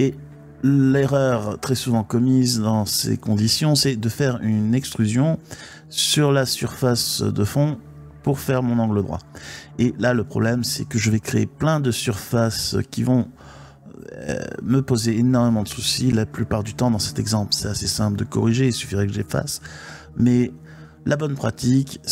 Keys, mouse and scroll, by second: 0.7 1, 5.3 3, 5.9-7.1 drag, 7.1 e, 8.2 click, 9.4-10.9 middle drag, 12.2-15.9 middle drag, 17.4 ctrl+z, 17.7 ctrl+z, 18.6 middle click, 21.1 shift+click.